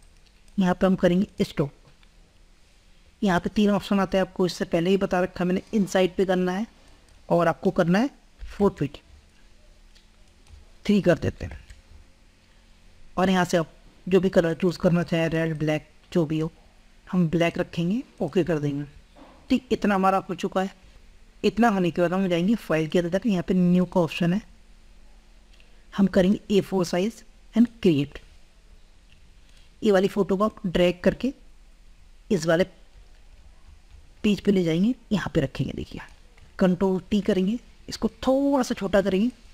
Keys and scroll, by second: 36.9 ctrl+t.